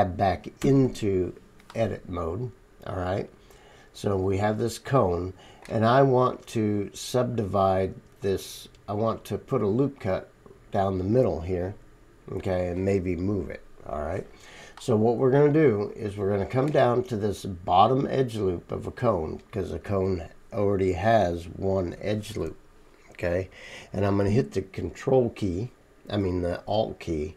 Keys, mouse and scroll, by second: 0.6 Tab, 2.7-26.2 middle drag, 2.8-3.7 right drag, 3.8-4.4 right drag, 16.1-27.3 right drag.